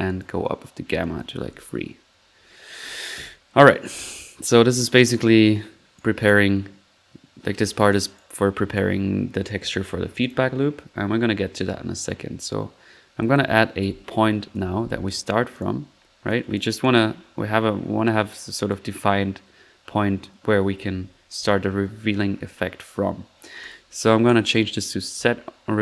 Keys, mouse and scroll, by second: 0.0-0.5 typing, 0.0 drag, 0.4 click, 1.0 click, 1.7-2.4 typing, 1.8 middle click, 2.7 middle click, 3.9-4.5 drag, 5.4 right click, 6.1-6.8 typing, 6.2-6.5 drag, 8.5 click, 8.7 click, 10.2 click, 13.2 middle click, 13.5-14.5 typing, 15.1 click, 15.9 middle click, 16.3 drag, 16.7 drag, 17.0 drag, 17.1 middle click, 18.7-20.5 drag, 21.6 middle click, 21.8 middle click, 23.6-23.9 drag, 24.2 click, 25.1 click.